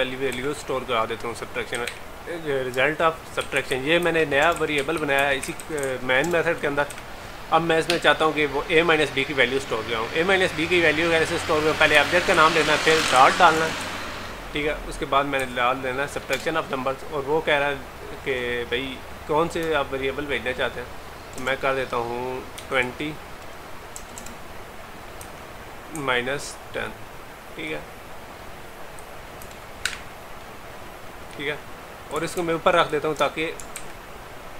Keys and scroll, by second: 32.4 ctrl+x, 33.8 ctrl+v.